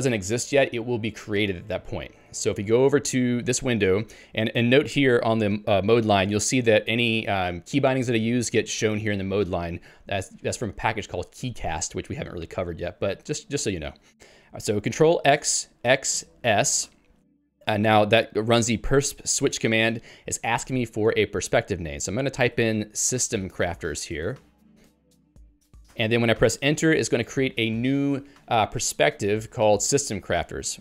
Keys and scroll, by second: 2.3 ctrl+g, 22.6-26.1 typing.